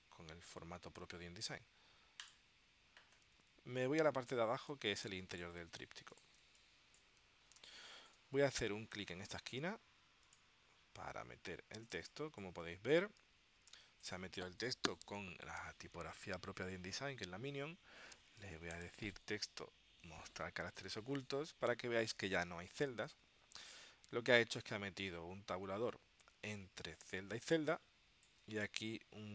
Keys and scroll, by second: 4.9 space, 7.8 space, 12.0 space, 13.8 space, 27.6 space.